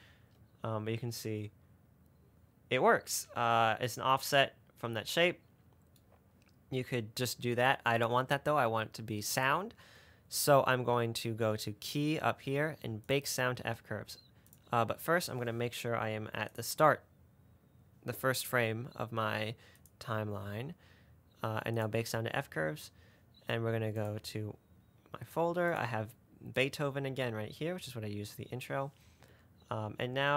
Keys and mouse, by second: 7.0 space, 8.2 click, 9.8-15.8 drag, 16.8 click, 20.2-22.5 drag.